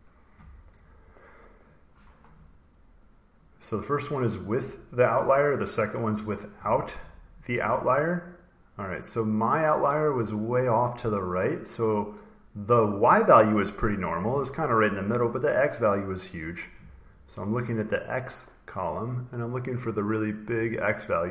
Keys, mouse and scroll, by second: 4.0 click, 6.0 click, 8.3 click, 8.9 click, 17.9 click, 19.9 click, 20.9 click.